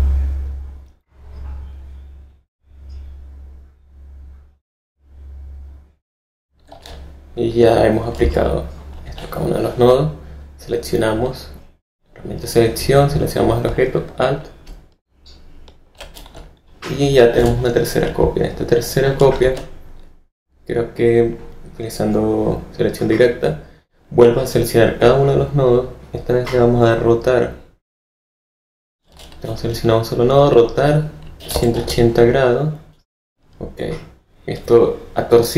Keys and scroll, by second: 17.3 v, 19.3 a, 31.1-32.0 typing.